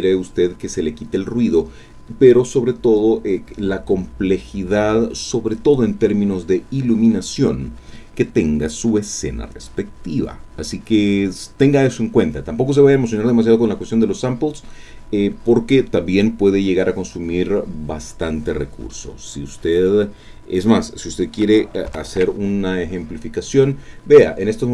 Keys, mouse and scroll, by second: 21.9 ctrl+alt+m.